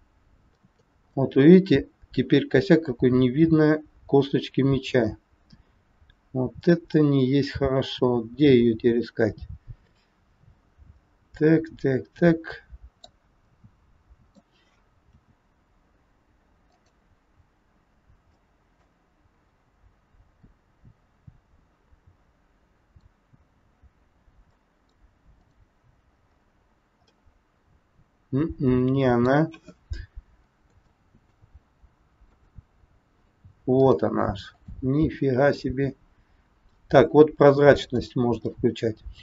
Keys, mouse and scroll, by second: 1.1 middle click, 13.4 middle click, 15.0 g, 18.3 middle click, 19.4 scroll up 2, 20.0-20.4 scroll up 1, 20.4 middle click, 23.4-23.7 scroll down 2, 24.4 middle click, 25.4 click, 26.3 scroll down 2, 27.2 middle click, 29.6-30.2 scroll up 2, 30.7 shift+scroll up 1, 30.8 shift+middle click, 32.3 click, 33.7 click, 37.7 click, 38.5 middle click.